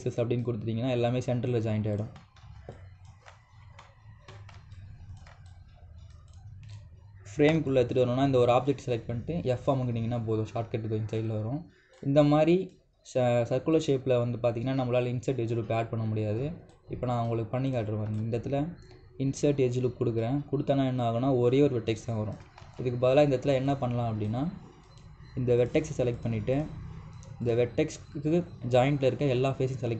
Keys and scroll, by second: 23.4 ctrl+z.